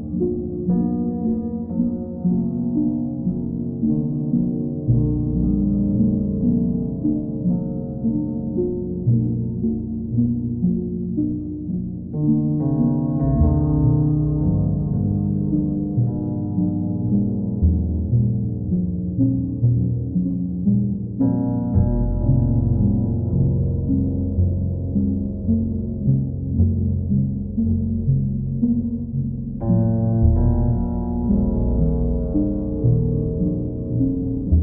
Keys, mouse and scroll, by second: 0.4 shift+click, 0.7 alt+click, 1.5 click, 3.0 q, 11.8 click, 12.0 ctrl+z, 14.0 click, 16.6 click, 16.8 ctrl+z, 18.6 click, 23.3 click, 26.4 click, 27.1 ctrl+click, 28.6 click, 28.8 shift+click, 29.6 alt+click, 30.4 alt+click, 30.9 click, 31.5 alt+click, 34.5 right click.